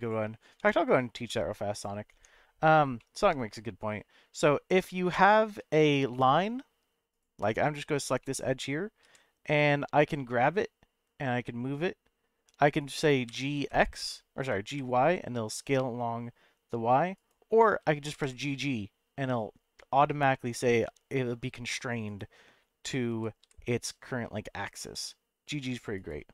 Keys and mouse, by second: 0.0 click, 0.6 Tab, 1.2 Tab, 2.1 Tab, 3.0-4.2 middle drag, 4.7 middle click, 5.6 2, 6.1 middle click, 8.2 middle click, 9.0 g, 12.8 right click, 13.3 g, 13.5 x, 14.7 y, 17.1 right click, 18.0 g, 18.2 g, 22.0 right click, 22.8 click, 23.1 g, 23.4 g, 25.9 right click.